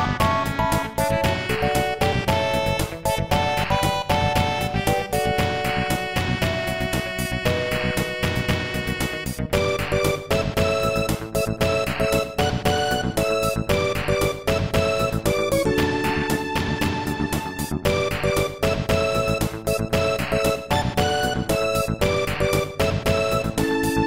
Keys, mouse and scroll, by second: 0.5 click, 6.0 click, 10.4 right click, 11.1 ctrl+s, 11.3 click, 12.7-13.4 typing, 14.5 c, 14.8 click, 21.2 right click, 21.8-22.4 typing, 23.6 8.